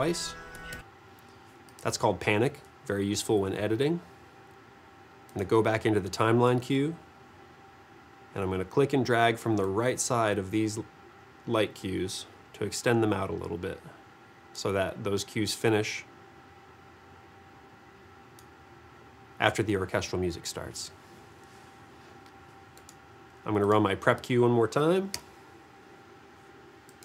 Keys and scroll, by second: 25.2 v.